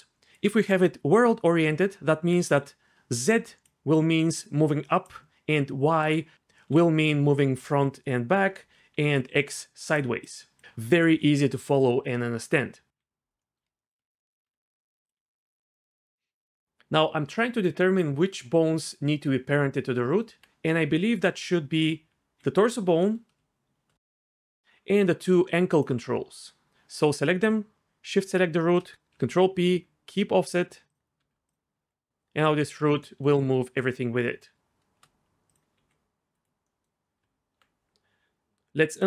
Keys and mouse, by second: 0.0-0.3 d, 0.5 d, 2.6-6.6 d, 3.2 click, 3.9 click, 9.0-12.9 d, 14.4 Tab, 15.1 g, 20.4 Tab, 20.7 Tab, 22.2 g, 22.6 click, 23.0 middle click, 24.3 shift+click, 24.6 ctrl+z, 25.7 shift+click, 28.2 shift+click, 28.9 ctrl+p, 28.9 ctrl+z, 29.1 ctrl+p, 31.2 Tab, 31.7 g, 32.6 click, 33.5 r, 33.6 r, 34.2 click, 35.7 g, 36.3 drag, 37.2 Tab, 38.9 click.